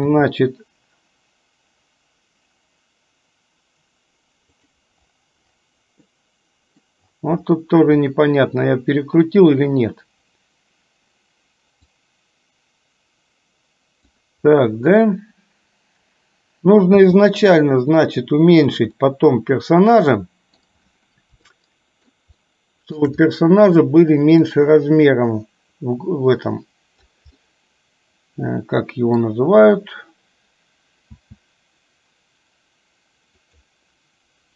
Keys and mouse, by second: 0.2 r, 6.3 middle click, 12.0-14.3 drag, 17.1 g, 19.2-20.9 middle drag, 21.8 shift+middle click, 22.6-23.3 shift+middle drag, 24.7-27.4 drag, 27.6-29.5 middle drag, 31.2 s.